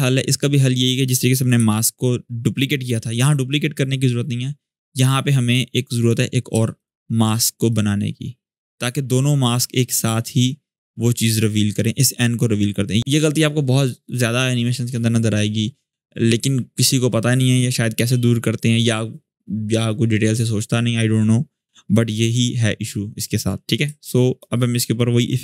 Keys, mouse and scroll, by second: 0.7 click, 1.3 m, 4.5 click, 6.5 shift+click, 7.4-8.7 drag, 9.8-10.8 drag, 11.4-12.0 drag, 13.0 space, 21.9-24.4 drag.